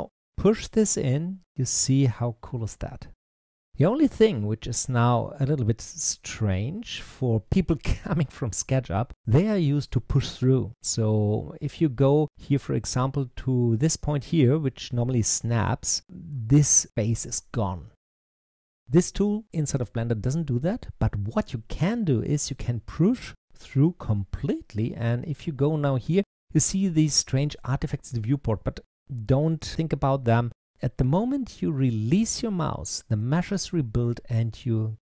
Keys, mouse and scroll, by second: 12.3 click, 33.1-35.1 middle drag.